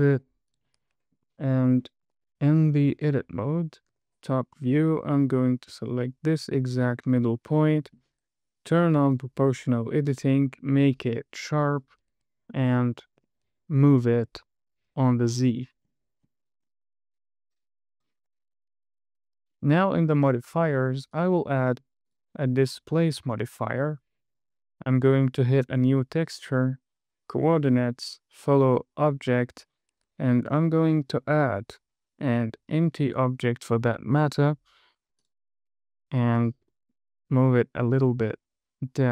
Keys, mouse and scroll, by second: 0.8-1.1 drag, 2.2 shift+middle drag, 2.6 Tab, 4.4 KP_7, 4.9-5.5 scroll up 2, 6.2 click, 7.1 KP_1, 7.6 scroll down 2, 8.1 shift+middle click, 9.5 click, 10.4-12.4 drag, 13.0 g, 13.5 z, 15.6-16.2 scroll down 1, 16.2-17.9 scroll up 8, 18.3 click, 19.0 Tab, 20.6 click, 21.5 click, 22.0-23.4 drag, 25.9 click, 28.0-29.1 drag, 30.8 shift+middle click, 31.4 shift+a, 34.5 s, 35.5 click, 36.9 g, 37.7 z.